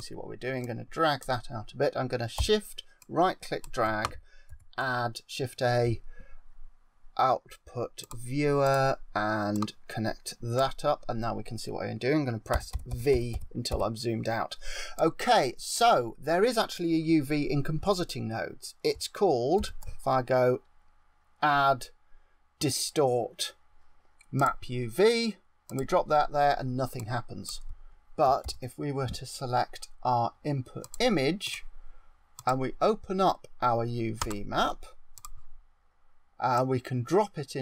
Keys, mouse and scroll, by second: 0.5 click, 2.9 shift+right click, 4.4 shift+a, 9.4 click, 12.5-13.7 typing, 14.9 click, 19.5 shift+a, 26.9 click, 28.3 shift+a, 32.2 click, 36.4 click.